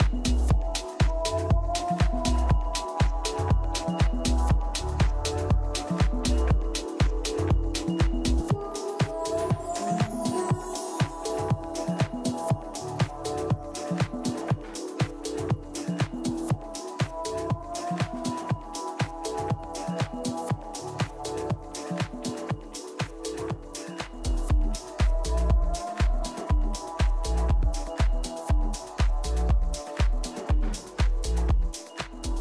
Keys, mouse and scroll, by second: 0.7-2.8 middle drag, 4.6 middle click, 4.9-7.0 middle drag, 7.0 scroll up 1, 7.0-9.9 middle drag, 9.5 e, 15.4 ctrl+z, 15.8 ctrl+z, 17.5 z, 18.5 a, 21.1 middle click, 21.3 KP_3, 22.4 a, 22.9-24.4 middle drag, 24.4 right click, 25.0-26.2 drag.